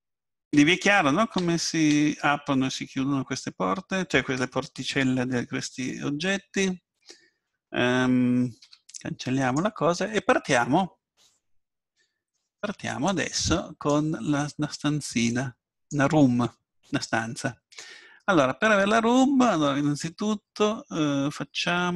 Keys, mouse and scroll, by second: 0.5 Tab, 1.4 a, 1.9 a, 8.6 x, 11.2-13.0 drag, 15.3-17.3 drag, 18.0-21.4 middle drag.